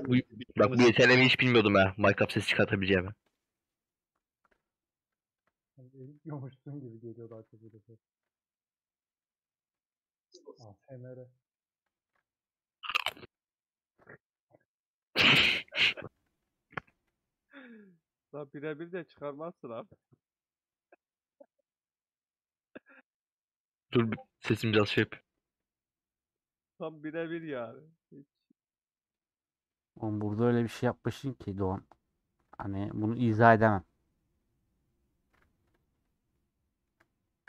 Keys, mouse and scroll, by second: 0.3-2.5 middle drag, 2.5 1, 2.7 click, 3.4 click, 3.9-5.3 middle drag, 5.3 KP_Decimal, 6.0 alt+z, 6.3 middle click, 7.3 alt+z, 8.8-12.0 middle drag, 12.0 click, 12.9-13.2 scroll down 2, 13.2 alt+z, 13.5 middle click, 14.1 scroll down 1, 14.3 alt+z, 14.6 middle click, 15.3 click, 18.5 middle click, 18.9 g, 23.3-25.0 middle drag, 25.0-25.5 scroll down 4, 25.5-27.1 middle drag, 27.1-27.5 scroll up 3, 27.5-30.5 middle drag, 33.5 scroll down 3, 33.6 scroll up 1, 33.7-34.3 scroll down 4, 34.3-35.5 middle drag, 35.5 3, 35.7 alt+click, 36.3-37.4 middle drag.